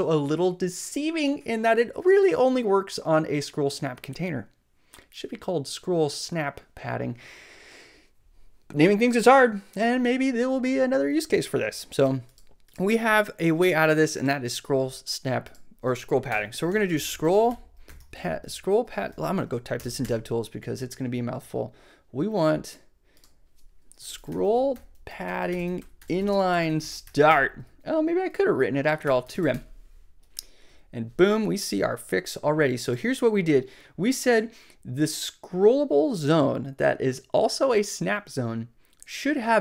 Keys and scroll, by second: 16.3 Return, 16.4-18.5 typing, 19.6 super+d, 19.7 super+BackSpace, 20.9 BackSpace, 23.7-27.5 typing, 28.8-29.9 typing.